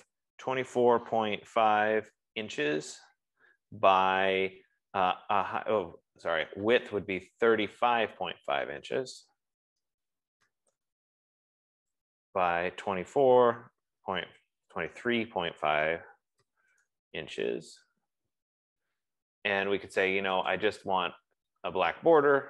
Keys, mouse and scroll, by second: 0.4-3.3 typing, 3.3 Tab, 7.1 click, 9.5-12.3 typing, 9.6 click, 12.4 Tab, 13.6-18.0 typing, 18.0 Return, 20.8-22.4 drag.